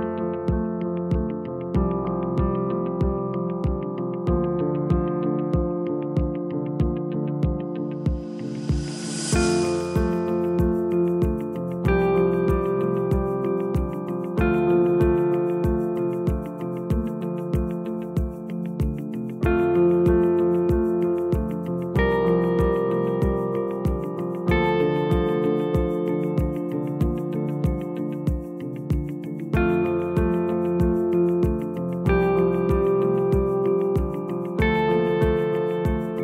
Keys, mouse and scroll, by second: 2.1 g, 6.4 r, 14.9 g, 17.4 r, 19.3 g, 22.1-22.7 scroll up 2, 22.7-23.3 scroll up 1, 23.3 r, 28.3 shift+d, 29.3-33.7 right drag, 33.7 g.